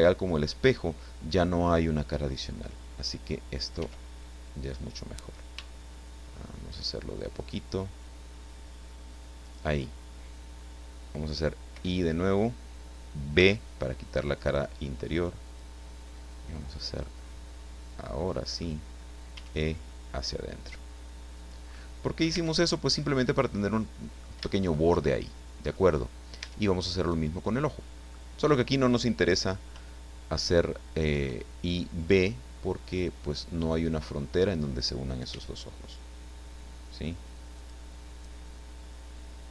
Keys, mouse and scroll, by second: 3.8 e, 9.4 shift+click, 11.7 i, 13.4 b, 15.4 click, 17.0-18.8 middle drag, 19.4 e, 21.4 click, 21.8 middle click, 22.4 Tab, 23.0-24.4 drag, 24.4 middle click, 25.1 shift+click, 26.4 Tab, 27.0 right click, 27.6 middle click, 31.1 i, 32.8 click, 33.2-34.3 middle drag, 35.3 e, 37.6 click.